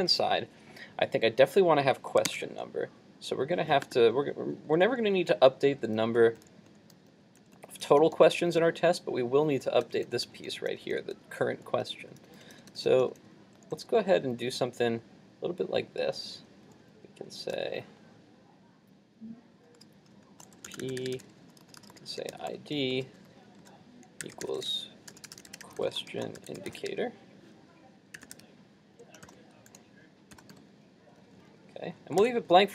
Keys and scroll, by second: 2.3 super+Tab, 32.2 super+s.